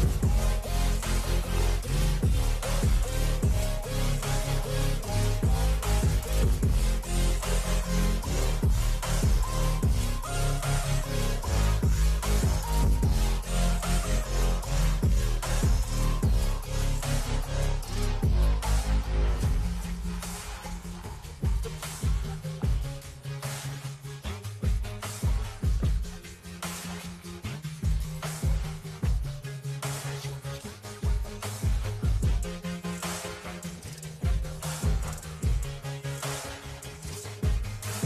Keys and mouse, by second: 4.4 Return, 5.5 click, 6.6 KP_2, 7.0 KP_0, 7.4 KP_Enter, 9.4 click, 10.7 click, 11.2 KP_0, 12.2 KP_Enter, 13.8 KP_3, 14.0 KP_0, 14.2 KP_Enter, 16.0 v, 16.7 click, 18.7 click, 18.9 Left, 19.6 Down, 19.6 Right, 20.2 Up, 21.8 z, 22.1 click, 23.1 space, 25.2 v, 26.2 click, 29.5 Up, 29.8 Up, 30.1 Up, 30.8 click, 32.4 Return, 32.8 Right, 33.0 Right, 33.4 Right, 34.2 click, 36.8 Up, 37.4 Down.